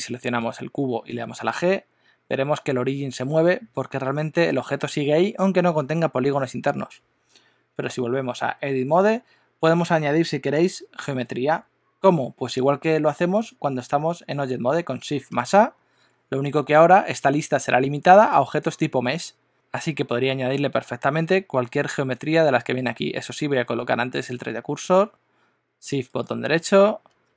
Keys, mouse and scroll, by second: 0.7 click, 1.1 g, 7.9 Tab, 15.3 shift+a, 19.5 shift+a, 26.0 shift+right click, 27.0 shift+a.